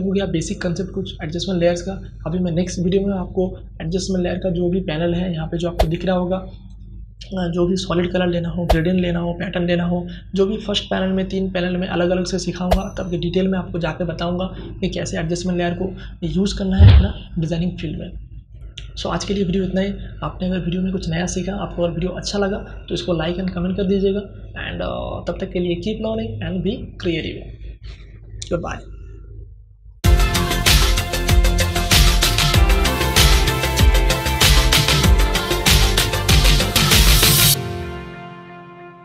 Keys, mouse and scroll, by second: 5.6 click, 17.9 click.